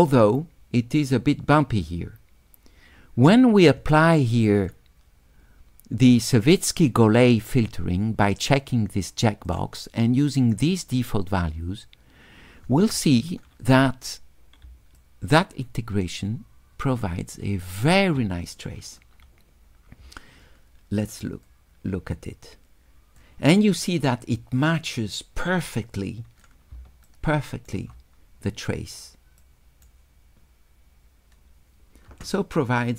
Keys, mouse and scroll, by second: 4.6 click, 9.5 click, 14.7 s, 15.0-17.8 drag, 21.5-23.2 drag, 25.2-26.5 drag, 27.1 shift+right click, 29.4 right click.